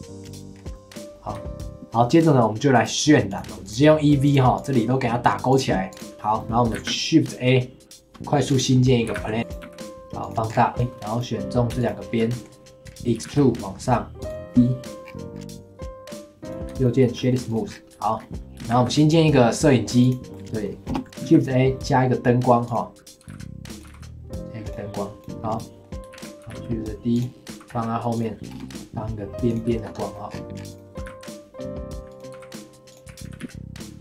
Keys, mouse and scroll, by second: 0.5 scroll down 2, 0.7 middle click, 1.3 Tab, 2.1 click, 3.3 click, 3.6 click, 5.5 click, 5.9 click, 6.1 scroll down 1, 6.4-6.7 middle drag, 6.7 shift+a, 9.1 g, 9.6 s, 10.5 scroll down 4, 10.7 Tab, 11.1 click, 11.8 shift+click, 12.3 middle click, 12.8 scroll down 2, 13.1 e, 14.5 ctrl+b, 16.7-17.0 right drag, 17.0-17.5 shift+middle drag, 17.5 click, 17.7-18.0 scroll up 4, 18.0-18.7 shift+middle drag, 18.7 shift+a, 20.3 middle click, 20.9 KP_0, 21.0 g, 21.2 shift+a, 23.2 g, 23.8 g, 25.1 g, 25.5-26.1 middle drag, 26.1 shift+d, 26.4 g, 27.5 g, 28.5 KP_0, 28.6 g, 28.7 scroll up 3, 29.5 click, 29.8-30.3 shift+middle drag, 30.3 scroll up 4, 30.6 g, 31.0 g, 32.3 g, 33.1 r.